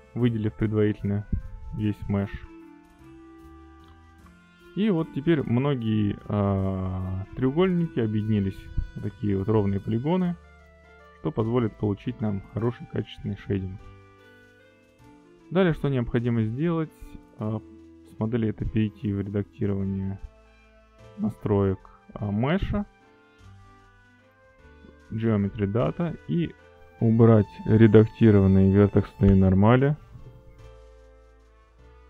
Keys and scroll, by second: 3.1 alt+a, 6.8 3.